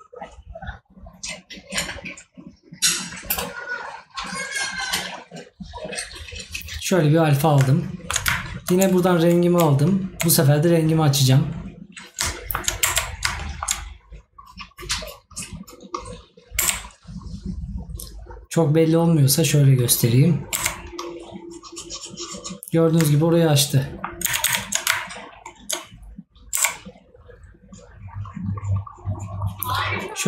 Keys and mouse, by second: 7.9 right click, 12.3 right click, 23.1 right click.